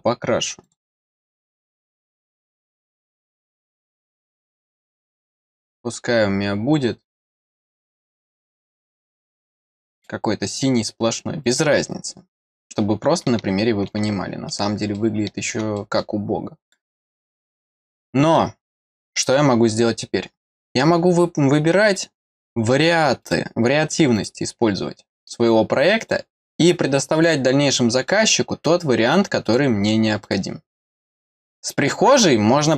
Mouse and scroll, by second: 0.6 click, 2.9 click, 7.4 middle click, 9.9 click, 11.4 click, 13.2 middle click, 14.0 middle click, 15.7 middle click, 16.6 click, 17.6 scroll down 1, 18.0 middle click, 20.6 click, 21.8 click, 23.2 click, 24.1 click, 25.2 click, 26.0 click, 27.1 click, 27.9 click, 29.4 click, 30.2 click, 31.7 middle click.